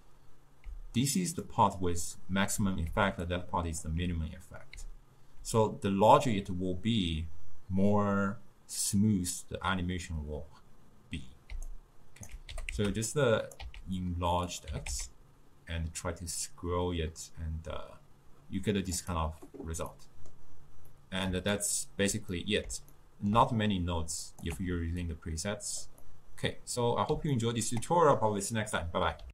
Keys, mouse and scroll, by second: 0.7-5.4 typing, 1.5 click, 3.4-3.9 drag, 6.7 d, 11.6 d, 11.8 right click, 12.6 g, 13.7 s, 14.8 g, 20.0-24.3 middle drag, 24.3 click, 24.6 x, 25.1 click, 26.2-29.3 middle drag.